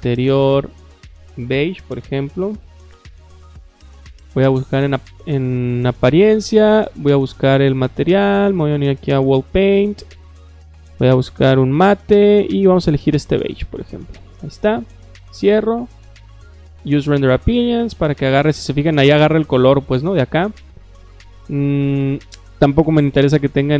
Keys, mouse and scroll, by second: 0.0-3.1 typing, 4.0 click, 6.1 click, 8.1 click, 8.6 middle click, 8.6 scroll down 2, 9.4 click, 9.9 click, 10.3 middle click, 10.9 click, 12.9 click, 13.1 click, 15.0 click, 15.6 click, 16.6 click, 18.2 click, 19.4 click, 20.5 click.